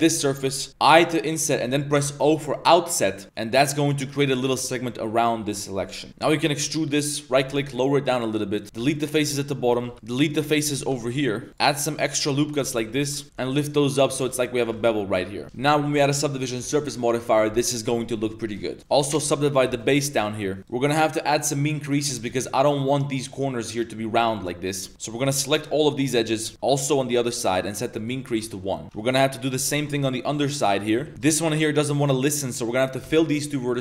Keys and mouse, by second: 6.3 shift+click, 6.5 e, 7.3 g, 8.8-10.9 typing, 11.5 ctrl+r, 11.7 click, 12.3 ctrl+r, 12.8 2, 13.2 alt+click, 13.3 g, 14.6 2, 14.7 alt+click, 15.1 middle click, 15.4 Tab, 15.4 ctrl+z, 15.4 ctrl+0, 16.0 middle click, 16.6 ctrl+2, 18.7 middle click, 19.7 ctrl+2, 20.0 a, 20.2 a, 20.6 Tab, 20.6 ctrl+z, 20.6 click, 20.9 middle click, 21.4 click, 22.1 a, 22.2 a, 24.3 middle click, 24.7 click, 24.9 Tab, 24.9 alt+shift+click, 25.5 alt+shift+click, 26.1 alt+shift+click, 26.5 z, 26.8 alt+shift+click, 27.2 middle click, 28.0 click, 28.8 Tab, 28.8 2, 29.0 alt+click, 29.7 alt+shift+click, 29.9 z, 30.3 click, 31.0 z, 31.1 f, 31.8 shift+click, 33.0 f.